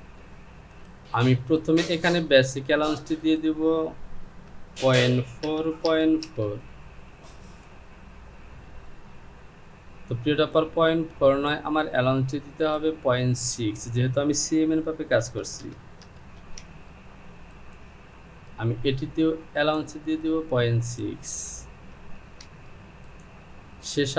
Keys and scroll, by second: 4.6 Down, 5.9 KP_Decimal, 6.2 KP_1, 6.4 Down, 13.8 Down, 16.0 KP_Decimal, 16.4 KP_6, 16.6 Down, 21.5 Down.